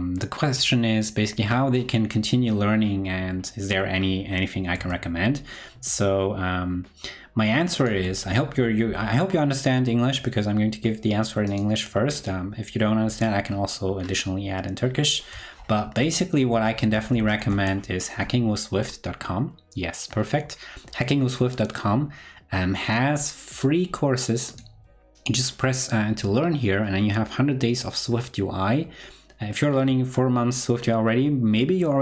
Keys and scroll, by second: 4.7 super+Tab, 15.8 super+t.